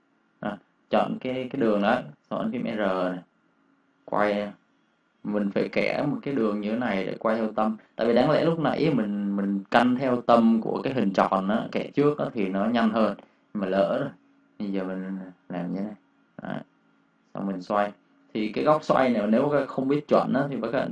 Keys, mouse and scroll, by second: 2.4 r, 4.8 r, 14.5 alt+Num_Lock, 16.2 alt+click, 20.6 Escape.